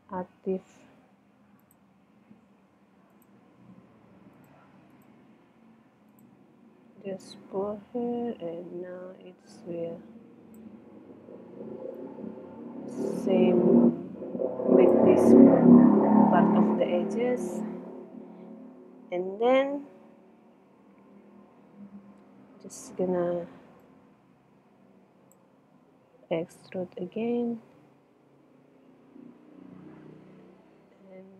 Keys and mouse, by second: 1.6-6.6 drag, 6.6 middle click, 7.4-9.3 drag, 9.3 middle click, 10.9 click, 11.7-13.4 middle drag, 21.3-23.7 middle drag, 23.8 click, 25.6-26.9 middle drag, 27.0 e.